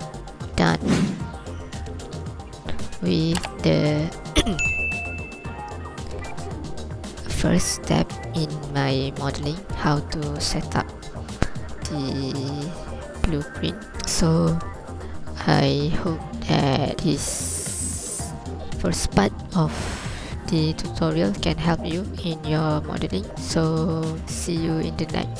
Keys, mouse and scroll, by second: 0.7 click, 1.8 alt+a, 2.1 scroll up 1, 2.5 ctrl+click, 2.9 scroll down 1, 3.4 shift+click, 7.7 scroll up 2, 7.8 ctrl+click, 8.6 scroll up 1, 8.9-9.6 scroll down 1, 9.8 shift+click, 13.6 scroll up 1, 13.9 z, 16.3 ctrl+click, 16.9 scroll down 1.